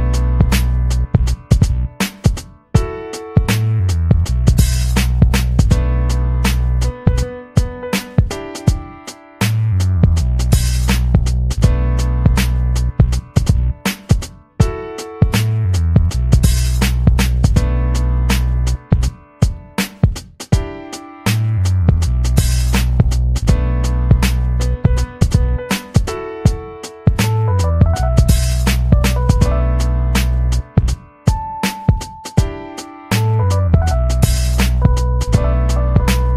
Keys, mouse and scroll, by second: 3.1 click, 5.2 click, 6.8-9.6 typing, 18.3 click, 35.9-36.3 ctrl+scroll up 2.